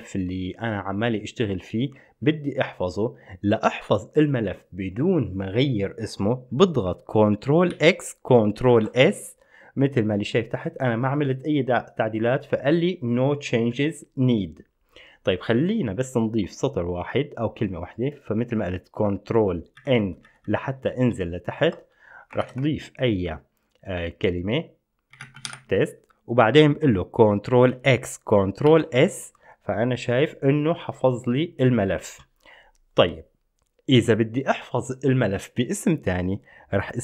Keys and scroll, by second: 7.9 ctrl+x, 8.8 ctrl+s, 20.0 ctrl+n, 20.2 ctrl+n, 20.4 ctrl+n, 20.7 ctrl+n, 20.9 ctrl+n, 22.6 #, 25.2-26.2 typing, 27.9 ctrl+x, 28.9 ctrl+s.